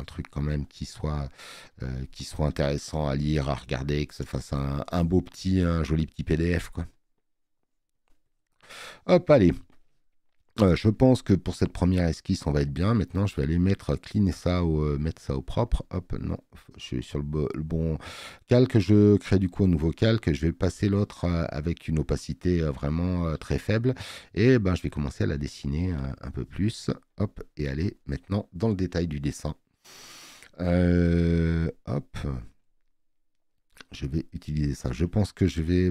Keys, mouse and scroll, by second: 4.6 space, 4.8 click, 17.5 click, 18.5-21.1 drag, 24.9 click, 26.5 click, 29.0 space, 29.2 click, 35.5 click.